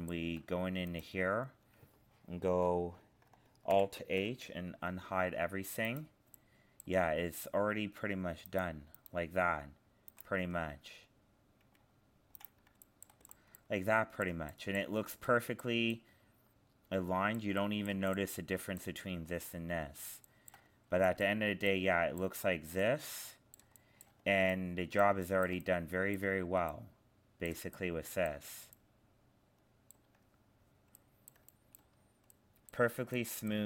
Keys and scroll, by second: 3.7 alt+h.